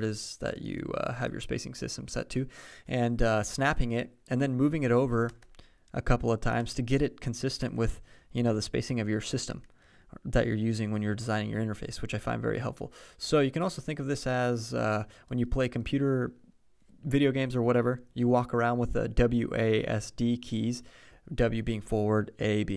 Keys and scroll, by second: 5.3 Right, 5.9 alt+Right, 6.6 alt+Right, 7.6 alt+Left, 7.9 alt+Left, 9.5 alt+Up, 9.8 alt+Up.